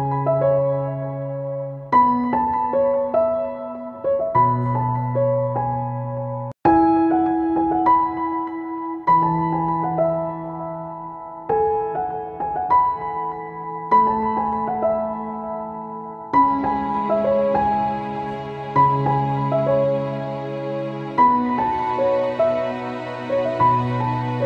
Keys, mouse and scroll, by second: 4.0-5.3 drag, 8.7 click, 11.5 click, 13.9 Return, 16.2 click, 19.6 click, 21.3 Return, 22.9 click.